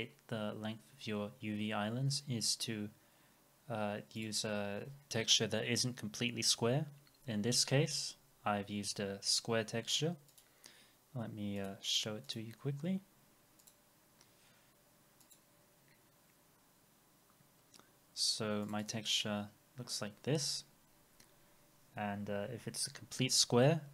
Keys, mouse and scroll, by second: 15.3 double click, 18.9 double click, 21.7 scroll down 1.